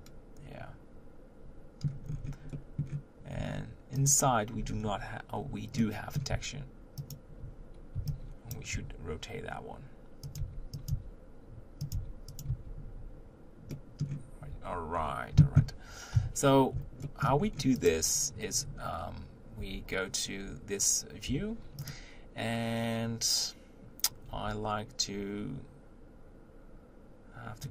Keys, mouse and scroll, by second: 2.0-2.5 scroll up 3, 2.5 middle click, 3.4 Tab, 4.1 click, 4.7 scroll down 2, 5.8-7.1 middle drag, 7.1 shift+click, 8.5 b, 8.7 r, 10.4 g, 10.9 s, 11.9 g, 12.5 Tab, 13.7-14.5 middle drag, 14.5 Tab, 14.9-15.3 scroll down 1, 15.3 Tab, 16.1 KP_1, 17.1 shift+middle click, 17.4-17.8 scroll up 2, 17.8 click, 19.6 Tab, 21.3 1, 21.9 click.